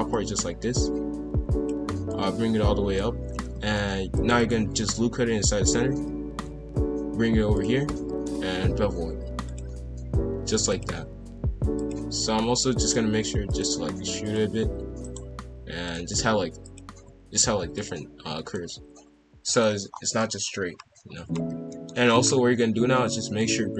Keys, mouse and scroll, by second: 0.1 click, 2.0 click, 3.6 ctrl+r, 5.8 g, 8.0 ctrl+b, 10.7-11.9 drag, 12.2-15.3 typing, 16.6 alt+click, 17.2 g, 18.4 ctrl+b, 19.9 scroll down 2, 20.2-21.5 middle drag, 21.5 a, 21.7-22.0 middle drag, 22.0-23.4 scroll up 3, 23.4 click.